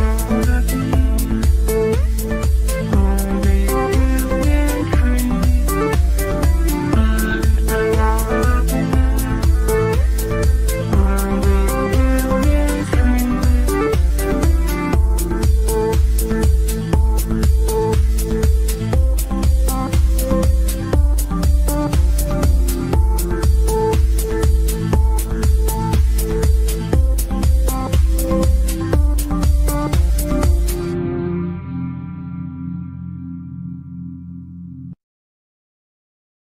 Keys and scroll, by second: 16.2 F3, 33.6 Delete.